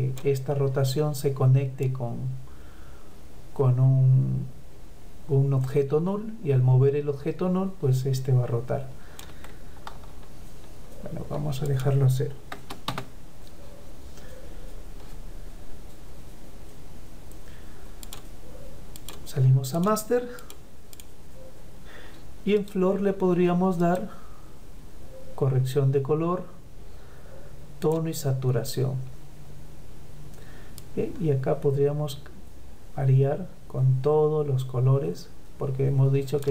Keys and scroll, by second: 8.9 ctrl+z.